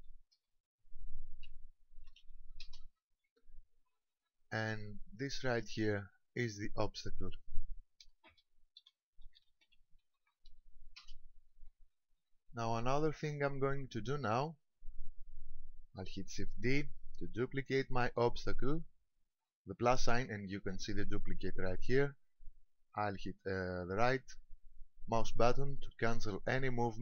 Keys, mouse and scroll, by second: 5.0 click, 6.3 ctrl+click, 13.9-14.6 scroll up 2, 16.8 shift+d, 26.9 right click.